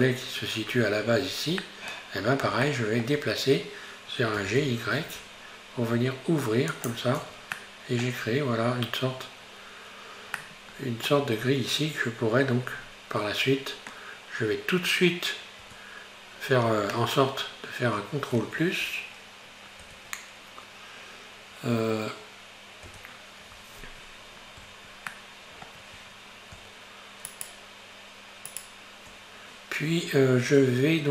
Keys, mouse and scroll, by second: 0.0-1.0 scroll down 1, 1.0 scroll down 1, 1.2-1.7 scroll up 3, 1.7-4.4 middle drag, 4.4 g, 7.2 Tab, 7.6 middle click, 8.1-8.6 scroll down 4, 10.4-11.4 middle drag, 11.4-12.6 scroll up 3, 12.8-14.1 scroll up 3, 15.7 Tab, 17.6-18.0 scroll up 1, 19.9 ctrl+KP_Add, 22.9 ctrl+KP_Add, 25.2 shift+middle click, 26.1-27.3 scroll up 1, 27.3 shift+right click, 28.5 shift+right click, 30.7-31.1 scroll down 1.